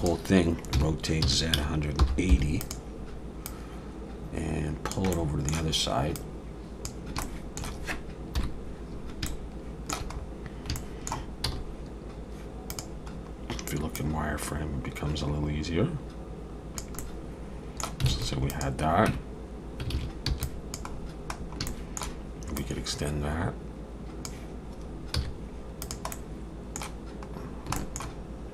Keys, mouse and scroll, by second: 0.7 r, 3.4 click, 5.1 middle click, 6.1 click, 7.2 shift+middle click, 8.4 KP_1, 9.3 shift+middle click, 10.2-10.7 scroll up 3, 10.8 shift+middle click, 11.4 z, 13.1-13.8 scroll up 3, 13.9 click, 17.0 middle click, 18.1 alt+a, 18.5 click, 19.1 Tab, 19.9 alt+a, 20.3 b, 20.9-21.6 scroll down 6, 21.7 shift+middle click, 22.6 click, 25.1 z, 26.1 middle click, 27.5 scroll down 2, 27.7 shift+middle click.